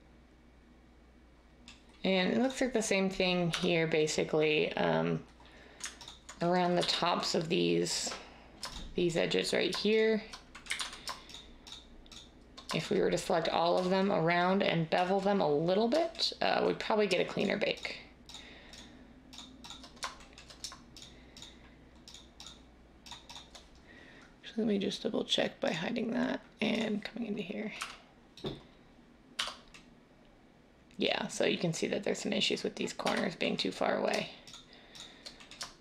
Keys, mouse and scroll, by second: 3.5 Tab, 6.7 z, 10.7 ctrl+z, 27.7-29.3 scroll, 29.3 Tab, 29.3 scroll, 32.9 Tab.